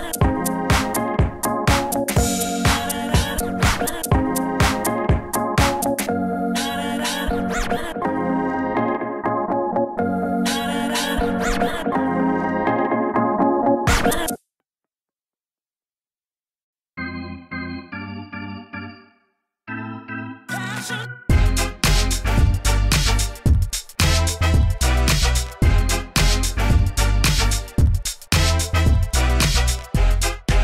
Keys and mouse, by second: 1.8 ctrl+z, 6.2 s, 7.8 ctrl+z, 8.8 s, 8.9-10.7 drag, 9.6 s, 10.4 s, 10.7 shift+f, 11.2-12.7 drag, 13.0 s, 13.1 f, 13.9 shift+f, 15.3 s, 17.4 s, 17.5 f, 18.1 s, 18.8 s, 20.0 ctrl+z, 20.1 shift+f, 25.9-26.9 drag, 27.0 click, 27.6 click, 27.9 middle click, 28.1 click, 28.3 s, 30.0 f.